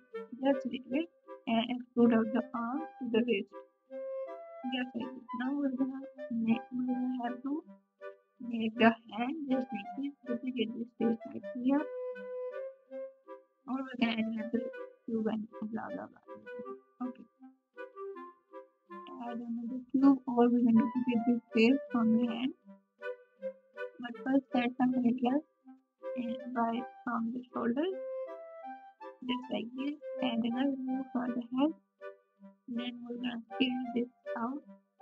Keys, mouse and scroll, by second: 4.0 r, 6.3 r, 10.8 KP_1, 12.5 g, 12.9 g, 15.2 g, 19.3 alt+z, 19.3-21.5 drag, 19.3 3, 23.5 g, 29.5 g, 32.3 KP_3, 32.3 s.